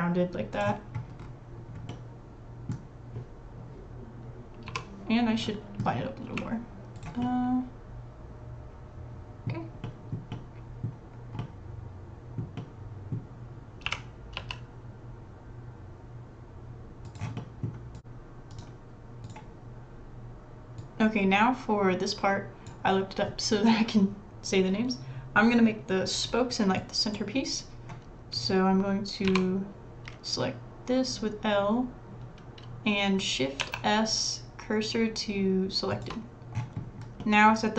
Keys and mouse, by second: 1.9 middle click, 2.0-3.6 drag, 4.7-5.7 drag, 4.7 l, 5.7 middle click, 5.9-7.2 drag, 6.2 g, 7.3 click, 7.6 middle click, 7.8-9.6 drag, 9.8 click, 10.3 middle click, 11.4-12.4 middle drag, 12.5 middle click, 12.7 click, 13.9 g, 17.4 click, 28.4 click, 29.3 l, 33.6 shift+s, 36.6-37.7 middle drag.